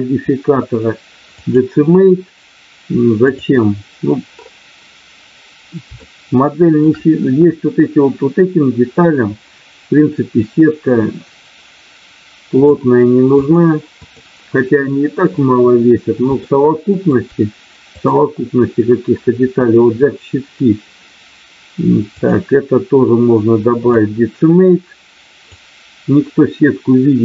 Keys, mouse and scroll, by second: 5.9 shift+middle click, 10.3-12.6 drag, 13.4 click, 16.6 shift+middle click, 18.1 click, 22.2-24.1 drag, 25.4-27.2 drag.